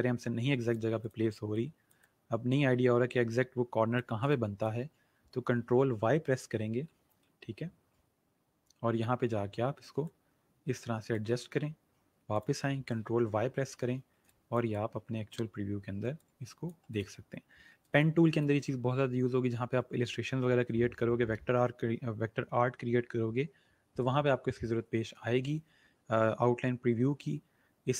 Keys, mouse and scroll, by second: 6.6 ctrl+y, 8.1 alt+scroll up 1, 9.2-10.0 scroll up 1, 10.0 click, 11.5-12.2 alt+scroll down 1, 12.2 scroll down 1, 12.3 click, 13.3 ctrl+y, 14.2 click, 17.8 space, 18.0 click, 18.3 space.